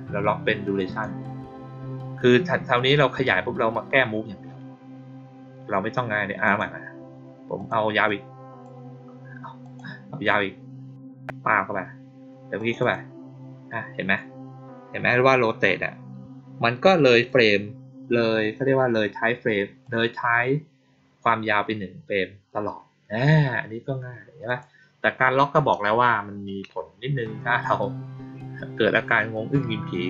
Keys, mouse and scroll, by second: 0.6 click, 0.8 click, 6.4 click, 7.5 click, 8.0-8.5 drag, 9.5 click, 11.3 click, 12.5 click, 12.7 click, 17.0 click, 19.7-22.5 drag, 24.4 click.